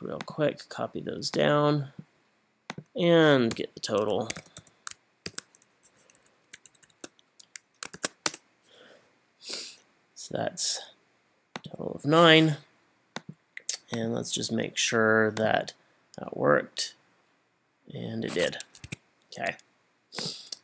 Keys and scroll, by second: 3.5-5.3 typing, 5.9 Up, 6.2 Up, 8.0 shift+0, 8.3 Return, 18.9 Escape.